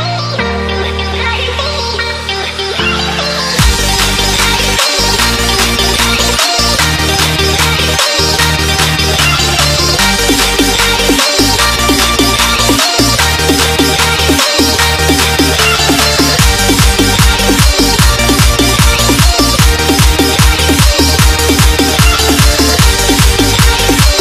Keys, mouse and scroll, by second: 0.6 click, 5.6 alt+Tab, 5.8 alt+click, 9.1 click, 11.0 Return, 11.2 t, 11.2 right click, 11.7 click, 12.7 Return, 13.1 click, 13.5 Delete, 14.2 click, 16.1 right click, 17.5 click, 19.9 click, 22.2 alt+scroll up 2, 22.6 click, 23.3-24.2 typing.